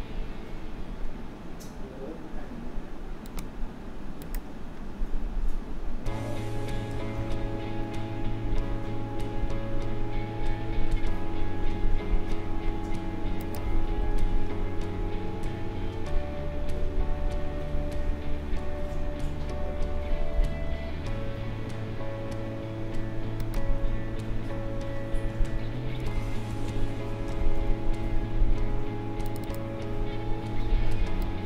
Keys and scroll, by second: 7.2 ctrl+z, 26.5 ctrl+shift+a, 27.6 k.